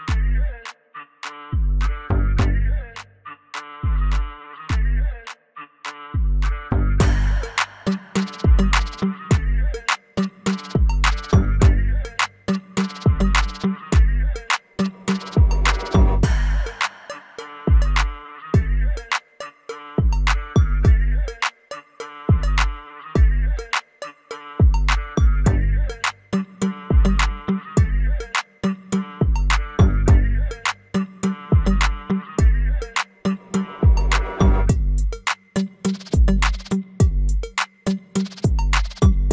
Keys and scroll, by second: 1.0 alt+w, 2.2 F4, 13.0 F3, 20.4 F3, 24.1 F4, 39.0 F4.